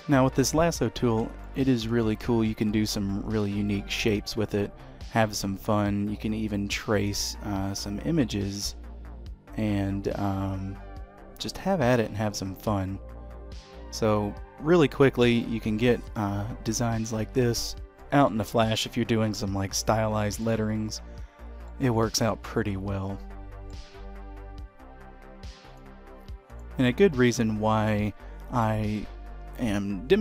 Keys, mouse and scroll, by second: 0.9 scroll down 1, 1.2 shift+middle click, 3.2 click, 15.2 middle click, 17.8 middle click, 19.3-19.8 scroll down 3, 19.6 middle click, 20.7-21.5 scroll up 4, 21.5 middle click, 26.7 click, 27.0 middle click, 29.7 middle click.